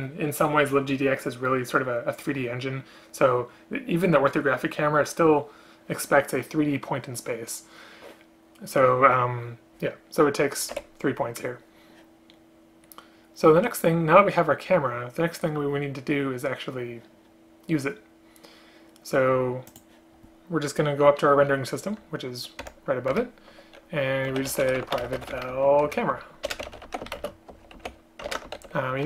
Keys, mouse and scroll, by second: 10.8 Escape, 23.2 Return, 25.1 space, 25.6 space, 26.5 BackSpace, 27.2 shift+space, 28.3 ctrl+BackSpace.